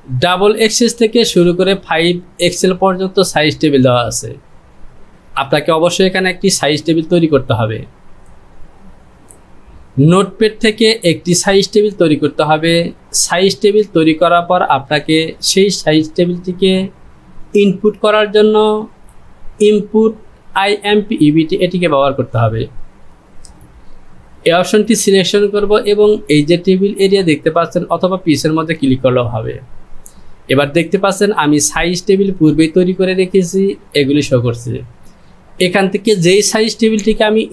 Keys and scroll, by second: 35.9-37.5 typing.